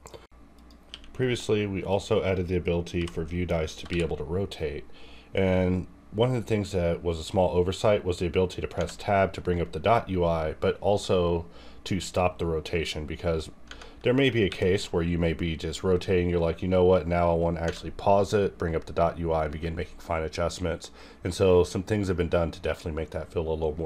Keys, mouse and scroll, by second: 0.1 ctrl+click, 0.9 q, 1.9 click, 1.9 click, 8.8 Tab, 13.7 Tab, 14.5 r, 17.6 Tab, 18.7-19.0 scroll down 1, 19.0 scroll up 1, 19.3-19.6 scroll down 1, 19.6-20.4 scroll up 1.